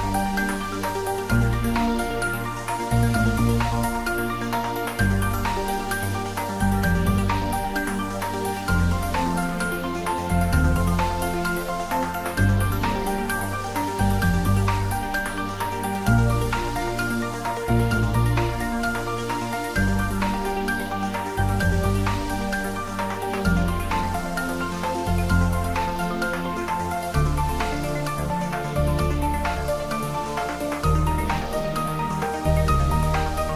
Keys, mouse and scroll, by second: 2.8 alt+shift+click, 4.4 Tab, 5.7 click, 7.1 alt+shift+click, 9.4 alt+shift+click, 17.6-19.1 scroll down 2, 21.0 click, 22.7 Tab, 24.9 scroll down 1, 27.2 click, 29.4 Tab, 30.5 click, 32.6 shift+click.